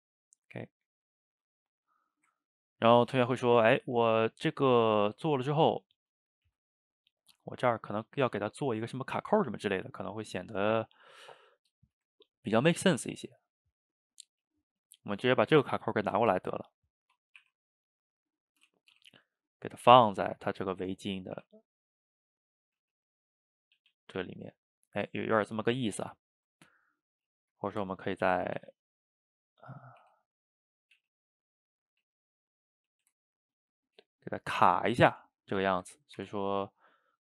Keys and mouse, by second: 0.0-2.1 drag, 2.1-5.2 ctrl+middle drag, 5.2 click, 5.7 middle click, 6.5 ctrl+z, 6.9 click, 7.5-13.4 middle drag, 13.4-14.6 drag, 14.6-15.3 shift+middle drag, 15.3 click, 15.5-16.2 middle drag, 16.2 shift+d, 17.0-17.5 middle drag, 17.5 r, 19.0 o, 19.1-19.9 middle drag, 19.9 g, 20.4-21.4 middle drag, 21.4 r, 22.2-22.8 middle drag, 22.8 g, 23.8 a, 23.9 a, 24.1-25.6 middle drag, 25.6 click, 26.0 shift+right click, 26.2-27.9 ctrl+middle drag, 27.9 Tab, 28.3 a, 28.7 shift+d, 29.5-30.1 middle drag, 30.1 r, 31.0 g, 32.1 Tab, 32.5 middle click, 32.9 a, 33.0 a, 33.2-35.1 ctrl+middle drag, 35.1 Tab, 35.7 shift+right click, 36.0 ctrl+middle drag, 36.2 Tab, 36.6-37.1 middle drag, 37.1 drag.